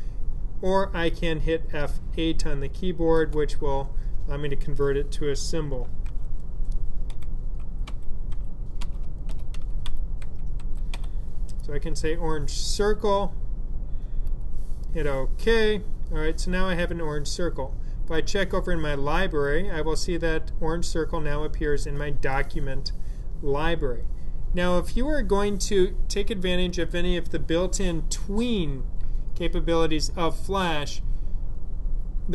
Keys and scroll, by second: 3.0 F8, 5.9-11.8 typing.